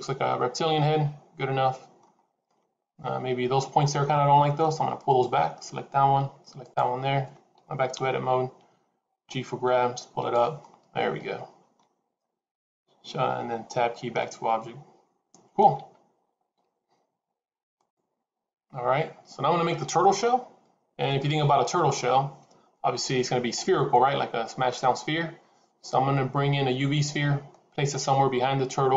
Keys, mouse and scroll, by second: 2.1-2.4 scroll up 2, 2.3 middle click, 3.6 Tab, 3.9 middle click, 4.9 click, 6.5 shift+click, 7.8 KP_3, 9.1 g, 10.5 middle click, 13.7 Tab, 14.1 middle click.